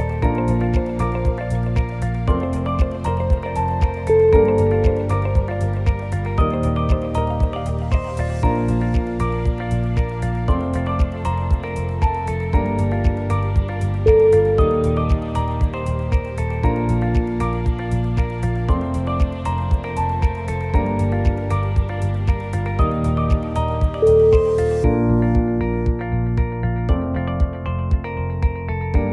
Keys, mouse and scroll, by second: 0.0 middle click, 1.5 shift+click, 2.6 g, 6.9 middle click, 8.5 g, 12.2 middle click, 12.8 scroll up 2, 13.0 shift+middle click, 13.5 scroll up 1, 13.7 shift+middle click, 14.9 click, 15.5 g, 17.6 middle click, 18.0 shift+middle click, 18.4 scroll up 1, 18.7 shift+middle click, 19.1-19.7 scroll up 2, 19.8 click, 21.0 alt+click, 21.6-22.2 scroll down 2, 22.5 shift+z, 22.7 c, 24.4 shift+middle click, 25.2 shift+z, 25.3-25.7 scroll up 4, 25.8 shift+middle click, 26.3 shift+click, 26.6 ctrl+z, 26.6 click, 26.6 middle click, 27.6 shift+click.